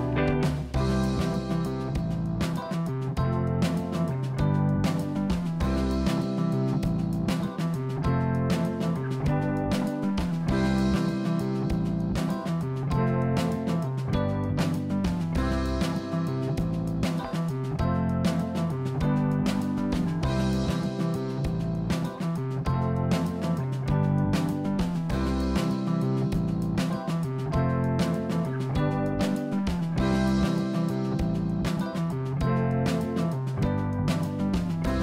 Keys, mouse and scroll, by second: 2.7 click, 3.2-4.5 middle drag, 4.5 click, 4.8-6.5 middle drag, 7.3-8.3 scroll up 2, 8.3 click, 9.9 ctrl+b, 12.1 click, 12.7 middle click, 13.7 click, 14.5 ctrl+b, 16.2 click, 16.7-17.7 middle drag, 17.7-18.2 scroll up 1, 18.2 click, 19.4 ctrl+b, 21.2 click, 21.4-22.1 scroll down 3, 22.1 middle click, 22.6-23.1 scroll up 3, 23.1 middle click, 24.0 ctrl+r, 27.5 click, 29.2 KP_1, 30.0 click, 30.6-31.9 scroll up 3, 33.2 g.